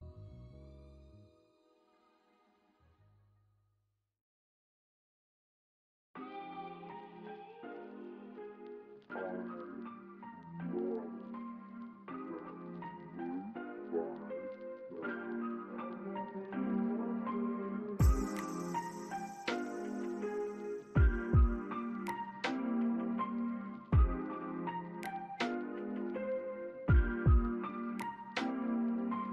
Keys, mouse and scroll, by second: 0.2 shift+click, 0.2 alt+middle click, 0.3 scroll up 1, 0.7 alt+middle click, 0.8 shift+click, 1.1 ctrl+z, 2.4 shift+click, 2.9 scroll up 1, 3.5 alt+middle click, 4.0 ctrl+z, 4.6 shift+click, 5.8 alt+middle click, 6.1 alt+click, 6.7 right click, 8.5 alt+click, 9.2 scroll down 1, 9.6 alt+click, 10.3 alt+middle click, 10.7 alt+click, 11.6 alt+middle click, 12.2-12.6 scroll down 2, 12.8 alt+middle click, 13.2 alt+click, 16.1 alt+click, 16.5 scroll down 1, 16.9 alt+click, 18.1 typing, 18.8 scroll down 1, 19.0 scroll up 1, 19.2-19.9 typing, 19.5 alt+click, 20.6 alt+click, 21.2 alt+right click, 21.2 click, 22.2 scroll up 1, 22.6 alt+click, 24.0 alt+click, 27.4 double click, 27.8 scroll down 1, 28.1 alt+click.